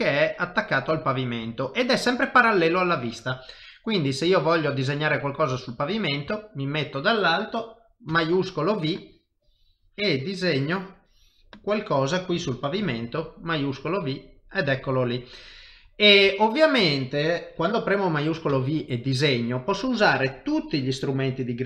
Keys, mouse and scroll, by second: 1.5 shift+middle click, 2.0 middle click, 5.5 KP_7, 6.4 shift+middle click, 8.1 shift+v, 8.9 click, 13.6 middle click, 16.2 KP_7, 16.9 shift+middle click, 17.1 shift+middle click, 18.5 shift+v.